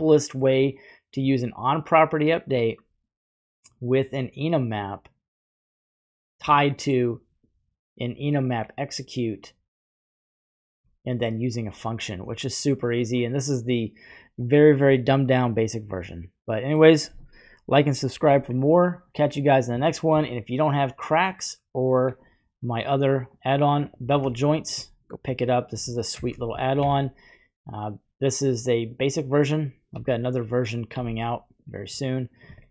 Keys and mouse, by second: 0.1 middle click, 1.2 click, 1.3 click, 2.5 typing, 3.6-5.7 drag, 6.6 middle click, 7.4-8.6 drag, 8.6 typing, 10.9 middle click, 15.2-16.8 middle drag, 21.3 click, 23.8 click, 24.3-24.7 shift+middle drag, 25.0 click, 26.1 shift+a, 29.0 shift+a, 29.9 s, 30.9 s, 31.6 click, 32.6 shift+middle click.